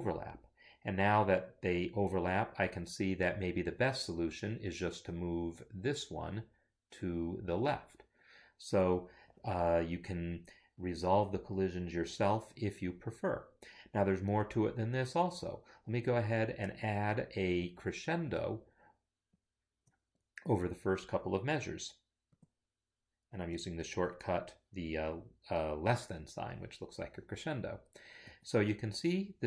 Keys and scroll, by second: 28.2 shift+,.